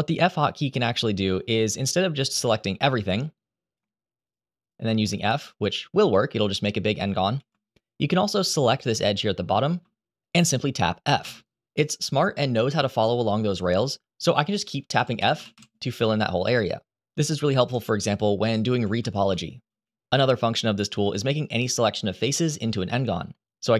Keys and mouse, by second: 2.8 click, 4.3 shift+click, 5.0 f, 7.1 ctrl+z, 8.5 click, 9.4 shift+click, 10.9 f, 14.7 f, 14.9 f, 15.1 f, 15.3 f.